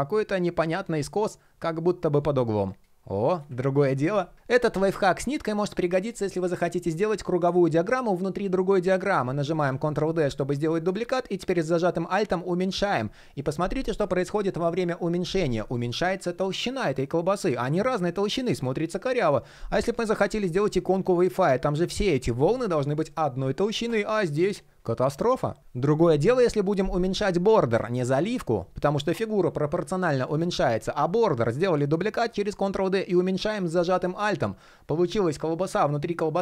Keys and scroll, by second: 9.3 super+d, 19.8 super+d, 30.5 super+d.